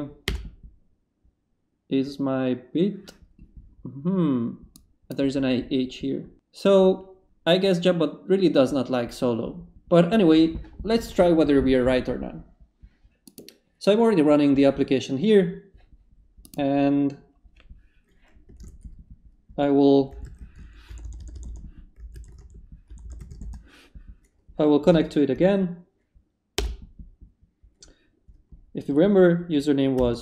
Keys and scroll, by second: 0.2 Return, 18.6 ctrl+c, 20.0-23.1 typing, 23.4 Return, 24.9 Up, 26.3 Up, 26.5 Return, 29.7-30.2 typing.